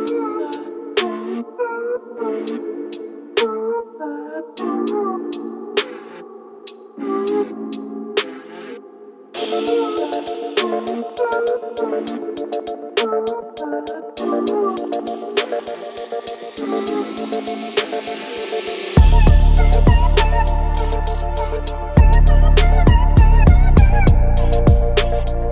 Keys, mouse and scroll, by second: 0.6-1.1 middle drag, 1.9-2.2 middle drag, 2.4-5.5 typing, 7.0 KP_1, 8.4 g, 9.3 z, 10.8 click, 11.4-11.7 middle drag, 12.5 middle drag, 13.7-14.7 s, 14.6 click, 15.6 s, 16.1 s, 16.1 s, 16.6-17.0 middle drag, 17.7 shift+a, 20.9-21.2 middle drag, 22.2-23.2 middle drag, 23.7-24.8 middle drag.